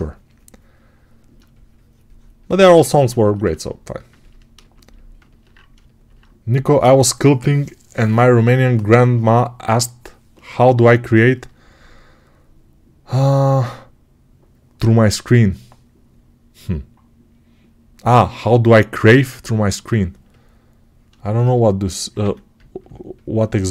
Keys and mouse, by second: 5.7-21.7 alt+shift+right drag, 21.8-23.7 alt+right drag, 22.1 1.